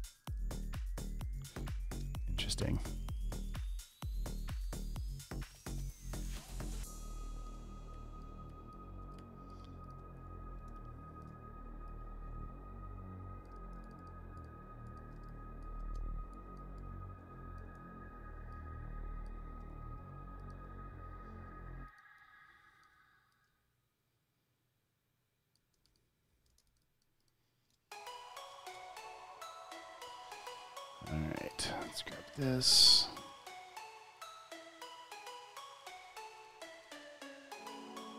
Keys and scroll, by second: 0.0-1.7 typing, 2.5 alt+super+space, 3.8-5.4 typing, 6.6-10.6 typing, 11.1 super+space, 13.6 space, 14.1 alt+super+space, 15.2 space, 15.7 space, 16.8 space, 17.1 space, 17.6 space, 19.5 space, 26.3 v, 27.1 alt+super+space, 29.8 space, 31.7 space, 36.0 space, 37.5 space, 37.6 space, 38.0 space.